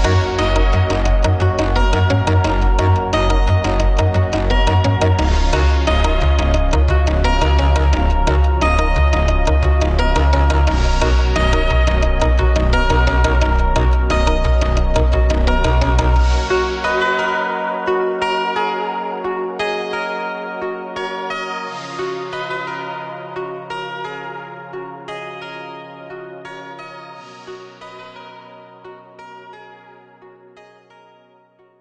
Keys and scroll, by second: 3.9 ctrl+v, 6.9 ctrl+[, 15.2 ctrl+=.